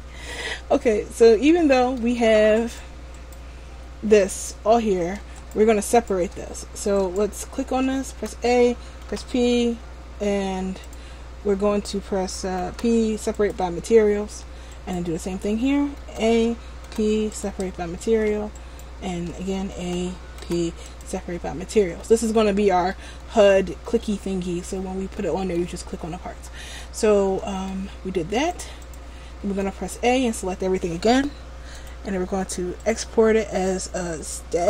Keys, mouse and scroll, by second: 1.0-1.4 scroll down 1, 1.4 middle click, 2.7 right click, 4.4 right click, 5.5 shift+right click, 6.1 shift+right click, 7.1 shift+right click, 7.6 Tab, 8.2 a, 9.1 p, 11.0 click, 14.3 Tab, 14.9 right click, 15.3 Tab, 16.1 a, 16.9 p, 18.2 Tab, 18.7 right click, 19.2 Tab, 19.9 a, 20.6 p, 22.0 a, 23.4 a, 25.3 shift+middle click, 26.6 shift+middle click, 27.2 scroll down 1, 27.5 middle click, 28.6 click, 29.6 a, 29.8 a, 31.8 click.